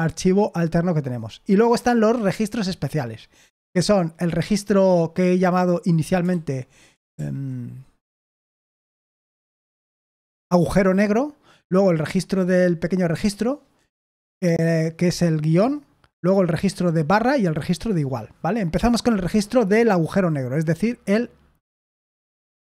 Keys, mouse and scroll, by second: 2.8-3.2 scroll down 1, 6.2 super+h, 7.1 super+l, 8.6 super+h, 9.0 super+l, 9.2 super+l, 22.1 Escape, 22.5 o.